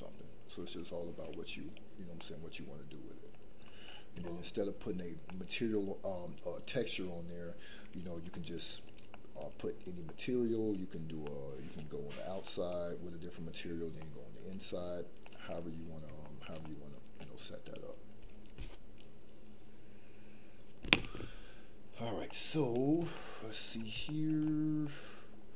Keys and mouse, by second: 1.3 click, 2.2-3.3 middle drag, 4.1 shift+middle click, 5.2-6.5 middle drag, 8.3 middle click, 9.1 middle click, 10.0 middle click, 11.2 middle click, 12.4 middle click, 14.0 middle click, 15.2 middle click, 16.2 shift+middle click, 16.6 middle click, 22.2-22.8 middle drag, 23.1 shift+middle click, 24.0 shift+middle click, 24.4 middle click.